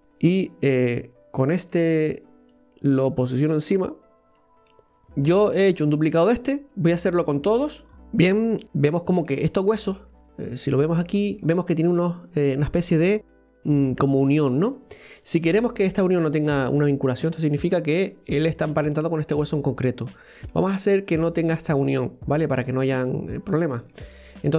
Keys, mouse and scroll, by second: 0.0-1.5 middle drag, 1.5 click, 2.5-4.7 drag, 4.7 middle click, 7.6-8.0 scroll up 2, 8.6 middle click, 9.4-9.8 scroll down 1, 9.8-12.7 middle drag, 12.7-15.3 scroll up 3, 15.3-18.1 scroll down 1, 20.2 scroll down 1, 20.5-24.5 middle drag.